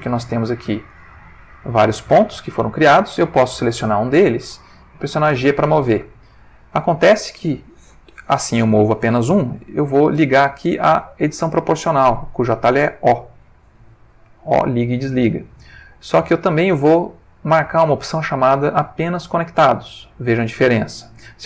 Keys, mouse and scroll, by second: 0.9-1.6 drag, 2.2-2.8 ctrl+middle drag, 2.8 ctrl+click, 4.6 g, 8.9 Escape, 11.8 click, 13.8 o, 16.1 click.